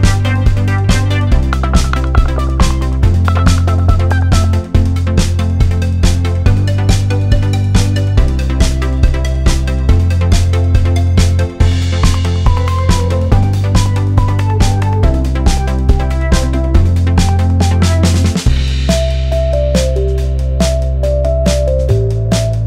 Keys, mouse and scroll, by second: 3.1 click, 8.7 click, 11.3 click, 13.1 click, 15.6 alt+scroll up 1, 15.9 alt+click, 16.2-16.6 alt+scroll down 1, 16.6 alt+scroll up 1, 16.9 click, 17.6 alt+scroll up 1, 17.6 alt+scroll down 1, 17.8 alt+scroll up 1, 18.1 alt+scroll down 1, 19.1 click, 19.4-19.8 alt+scroll down 1, 19.8 click, 20.6 right click, 21.1 click, 21.8 right click, 22.5 click.